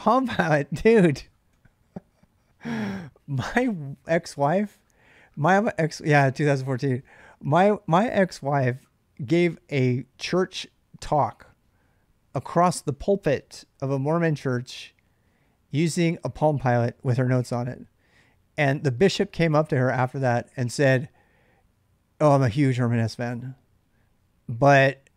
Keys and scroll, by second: 0.0-0.2 typing, 1.3 j.